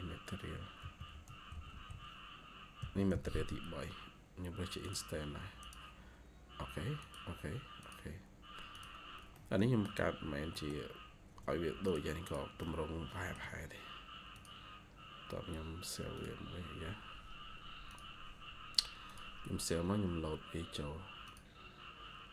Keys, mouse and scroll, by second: 9.2 middle click, 10.1 scroll down 1, 10.4 middle click, 12.1 double click, 12.5 middle click.